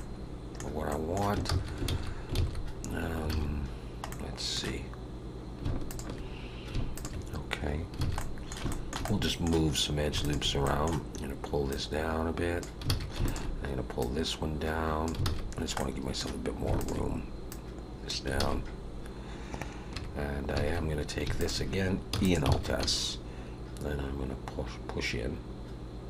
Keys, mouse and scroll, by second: 0.9 middle click, 1.5 ctrl+z, 1.9 ctrl+z, 2.4 ctrl+z, 3.3 alt+a, 4.1 middle click, 5.8 alt+shift+click, 6.9 alt+shift+click, 8.0 alt+a, 8.1 middle click, 8.7 shift+middle click, 9.0 middle click, 10.2 alt+shift+click, 10.6 middle click, 11.7 click, 12.9 alt+a, 13.2 click, 14.0 click, 15.2 alt+a, 15.7 middle click, 16.8 alt+shift+click, 17.5 click, 18.4 alt+a, 19.9 3, 21.4 alt+shift+click, 22.1 e, 22.5 alt+s.